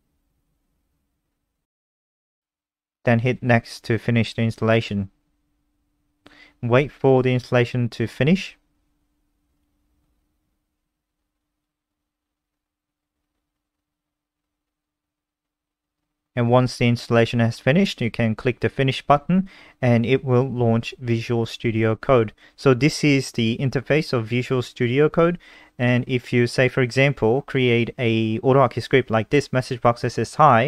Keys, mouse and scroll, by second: 26.9 super+2, 27.2 click, 27.6-29.5 typing.